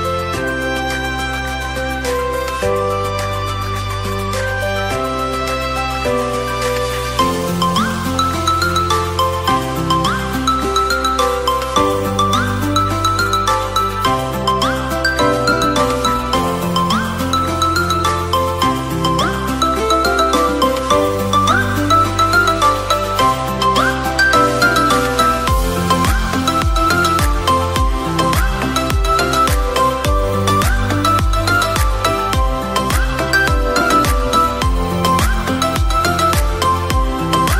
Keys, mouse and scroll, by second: 2.9 click, 5.3 click, 6.3-7.6 drag, 8.3 click, 15.7 click, 16.2 click, 16.8 click, 17.2 click, 17.4 click, 19.3 click, 22.4 click, 22.6 click, 23.0 click, 26.7-27.7 middle drag, 28.6-29.1 scroll down 2, 29.1 click, 30.6 click, 31.5-33.8 drag, 36.1 click, 37.4 click.